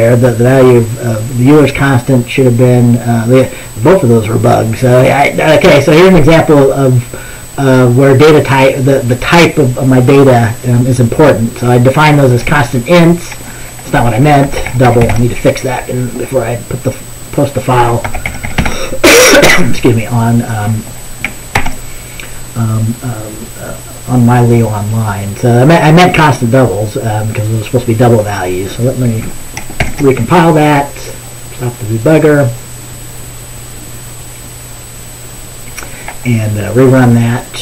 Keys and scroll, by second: 14.4-15.7 typing, 18.0-19.2 typing, 21.6 ctrl+s, 29.9 ctrl+b.